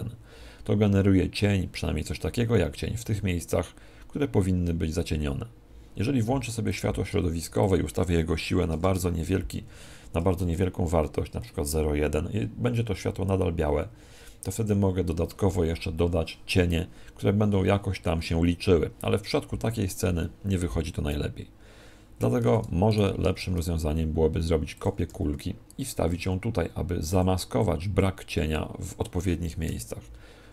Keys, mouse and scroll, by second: 22.2 Escape, 22.8 right click, 23.4 shift+d, 24.8 click, 25.0 s, 25.8 click, 26.0 g, 27.1 click, 27.9 click.